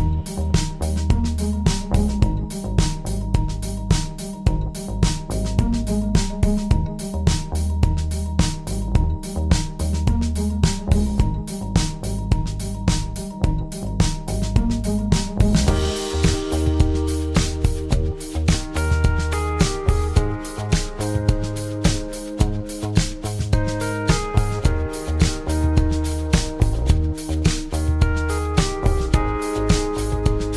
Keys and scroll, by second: 3.3 super+d, 22.8 super+c, 23.0 super+v, 25.2 super+c, 25.5 super+v, 27.7 BackSpace, 28.2 BackSpace.